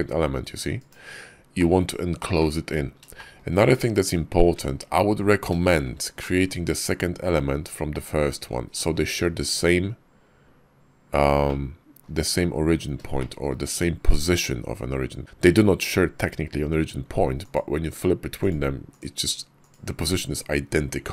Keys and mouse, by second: 1.4 middle drag, 2.2-2.6 middle drag, 3.0 shift+click, 3.4 middle click, 3.4 click, 4.3 `, 4.9 KP_5, 5.5 shift+click, 6.0-6.3 drag, 6.6 KP_5, 11.3-11.9 middle drag, 13.0 shift+middle drag, 17.2 click, 17.7 click, 18.3 click, 18.8 click, 19.4 click.